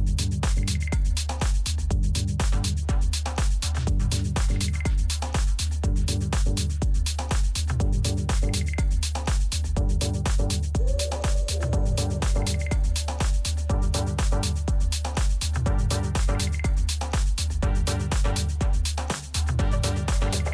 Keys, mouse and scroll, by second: 2.1-4.5 middle drag, 8.3-12.1 middle drag, 12.8-18.3 middle drag, 15.3 z, 16.9 a, 17.3 a.